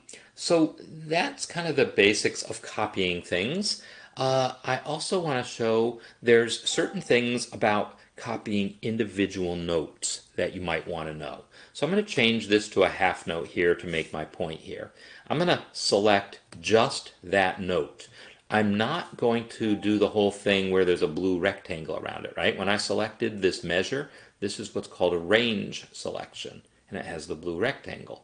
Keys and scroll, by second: 12.2 6.